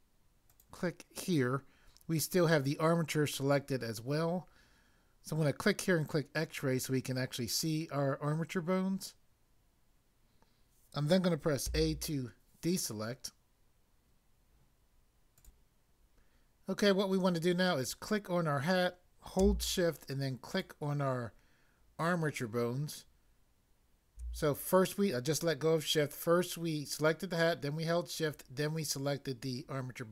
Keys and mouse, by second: 0.5 click, 6.0 click, 11.7 a, 15.4 click, 15.4 click, 17.8 click, 20.5 shift+click.